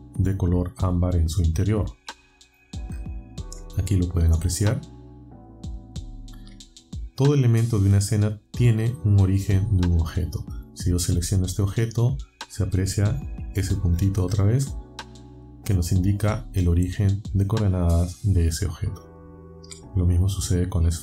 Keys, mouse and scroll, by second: 2.5-3.2 alt+scroll up 4, 5.2-5.9 alt+scroll down 4, 11.9 click, 13.9-14.6 alt+scroll up 4, 18.3-19.7 alt+scroll down 8, 20.5 click.